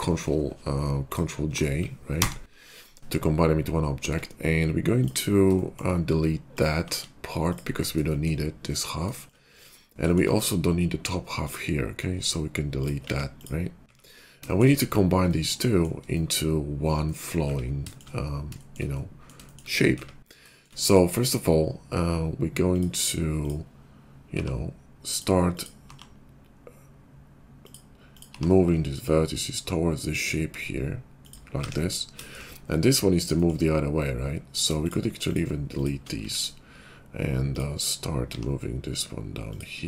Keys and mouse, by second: 2.1 ctrl+j, 4.0 Tab, 7.0 x, 9.5 `, 10.2-12.2 middle drag, 12.6 ctrl+click, 12.9-14.3 middle drag, 12.9 x, 13.8 `, 14.6-22.9 middle drag, 19.8 `, 24.2 g, 25.8 g, 28.3 g, 31.5 `, 36.1 x, 37.4 click, 38.1 g.